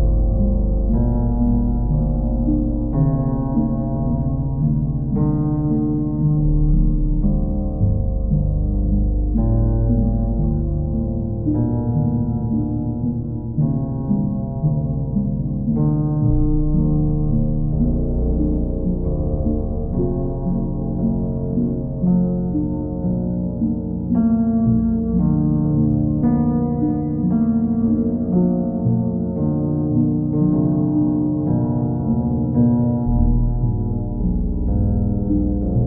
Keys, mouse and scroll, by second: 0.3 alt+click, 0.5 alt+click, 1.5 click, 5.8 click, 7.8 click, 8.1 shift+click, 9.5 click, 10.9 q, 11.5 ctrl+click, 12.8 click, 13.8 click, 14.2 click, 15.5 click, 15.8 shift+click, 16.8 alt+click, 20.6 click, 21.0 alt+click, 22.3 shift+click, 24.0 click, 24.4 shift+click, 24.9 alt+click, 26.7 ctrl+click, 28.1 alt+click, 30.8 alt+click, 31.2 alt+click, 34.4 click, 35.0 alt+click.